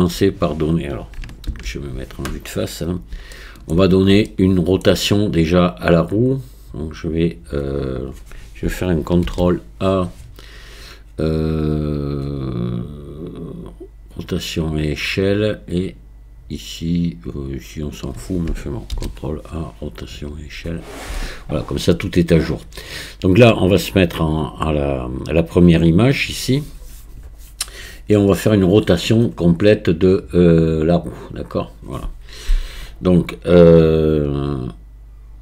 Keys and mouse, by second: 1.5 ctrl+KP_1, 3.4-3.7 shift+middle drag, 4.3 shift+click, 4.5 shift+middle click, 4.5 shift+click, 4.6 shift+middle click, 9.3 ctrl+a, 17.5 click, 18.9 ctrl+a, 21.3 click.